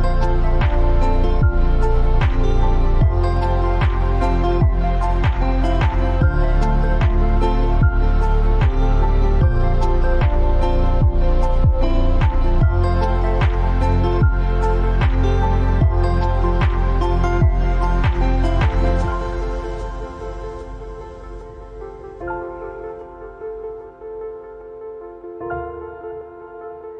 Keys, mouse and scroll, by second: 1.5 shift+Num_Lock, 1.5-5.7 drag, 6.5 alt+scroll up 1, 7.8 space, 7.9 click, 8.4 space, 9.4 alt+scroll up 1, 10.2 space, 10.3 click, 10.7 space, 13.5 click, 16.6 shift+click, 19.0 shift+click, 21.8 right click, 25.5 click.